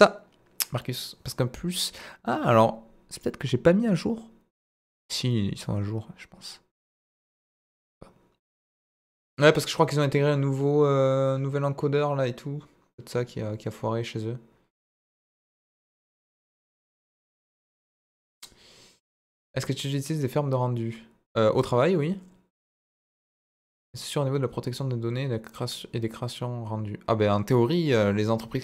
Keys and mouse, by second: 7.0 click.